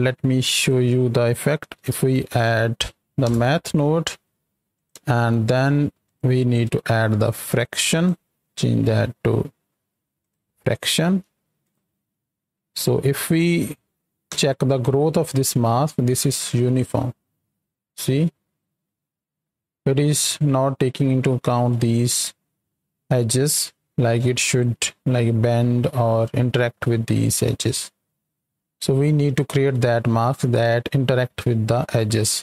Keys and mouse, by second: 0.4 drag, 2.0 d, 4.7 click, 5.2 shift+d, 6.0 click, 6.6 click, 7.9-10.3 drag, 11.6 ctrl+shift+click, 14.2 KP_7, 16.0-20.2 shift+drag, 24.7-30.5 shift+drag.